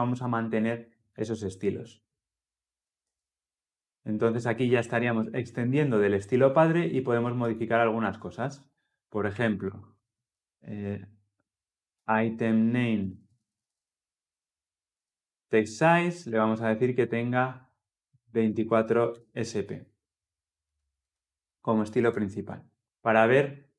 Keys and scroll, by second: 12.0 Return.